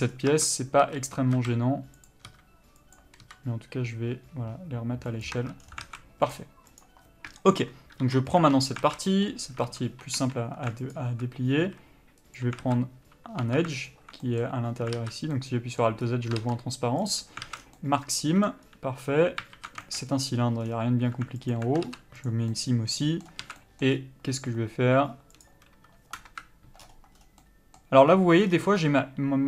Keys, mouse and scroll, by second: 0.3 scroll up 1, 0.5 Tab, 1.0 a, 1.6 s, 5.5 Tab, 5.8 scroll down 1, 6.0 alt+a, 6.5 click, 8.2 KP_Divide, 8.6 Tab, 9.0 alt+a, 9.3 middle click, 9.5 scroll up 1, 9.8 1, 10.4 3, 11.1 alt+click, 11.8 z, 12.8 alt+a, 13.6 2, 14.1 alt+click, 14.4 middle click, 15.2 alt+z, 15.5 middle click, 16.2-17.3 scroll up 1, 17.3 ctrl+e, 17.6 alt+a, 17.8 scroll down 1, 17.9 middle click, 18.8-19.8 scroll up 1, 19.8 alt+z, 20.0 shift+middle click, 20.3-20.6 scroll up 1, 20.8 scroll down 1, 21.7 alt+click, 22.5 ctrl+e, 22.7 middle click, 23.6 alt+a, 23.8 middle click, 24.1-24.7 scroll up 1, 24.7 scroll down 1, 25.5 click, 26.5 KP_Decimal, 27.0 scroll up 1, 27.4 scroll down 1, 27.6 middle click, 28.3 scroll up 1, 28.6 scroll down 1, 29.0 scroll up 1.